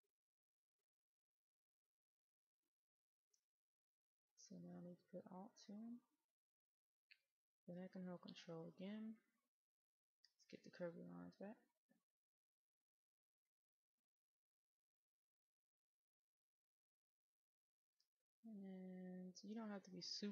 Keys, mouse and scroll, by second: 5.9 alt+click, 10.1 ctrl+click, 11.8 ctrl+click, 12.6 middle click, 13.9-14.6 scroll up 1, 15.9 ctrl+click, 20.0 ctrl+click.